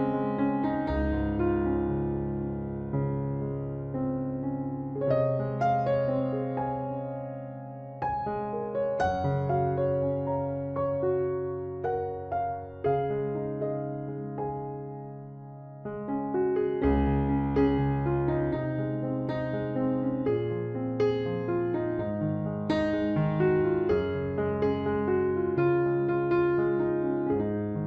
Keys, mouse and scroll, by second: 0.1 KP_3, 0.6 KP_Decimal, 2.7 Tab, 2.9 z, 8.3 ctrl+r, 11.9-13.0 middle drag, 13.0 click, 13.3 ctrl+r, 15.2 ctrl+Tab, 16.1-17.2 right drag, 16.7 KP_Decimal, 18.5 ctrl+r, 20.5-24.0 right drag, 20.7 c, 23.1 e, 25.3-27.1 right drag, 26.0 b, 26.4 g.